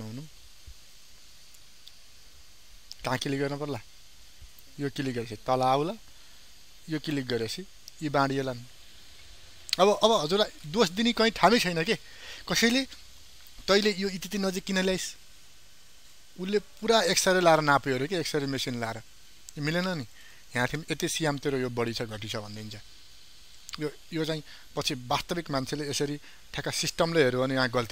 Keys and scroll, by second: 19.9 ctrl+space.